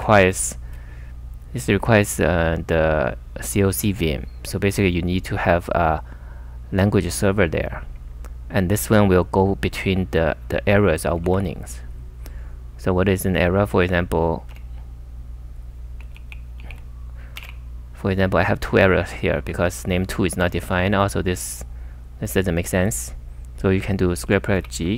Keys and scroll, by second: 0.0 super+Tab, 11.3 super+Tab, 14.5 u, 16.2 ctrl+r, 16.6 ctrl+r, 17.4 ,, 18.2 s, 19.3-21.1 typing, 24.0-24.9 typing.